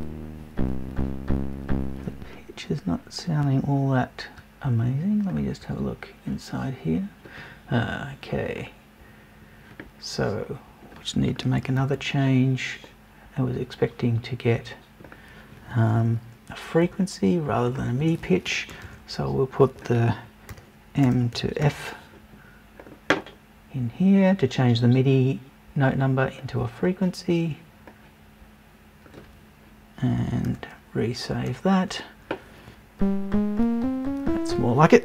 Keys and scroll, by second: 16.8 BackSpace, 18.0 BackSpace, 18.7 super+BackSpace.